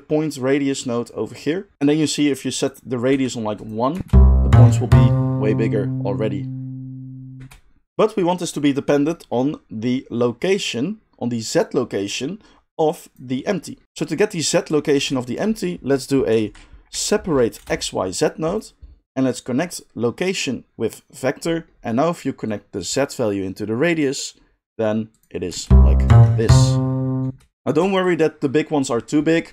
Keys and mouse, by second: 3.6-12.8 middle drag, 3.9 space, 7.3 space, 12.8-18.6 drag, 14.9 shift+a, 18.6-19.2 middle drag, 19.2-29.5 drag, 25.5 space, 27.2 space.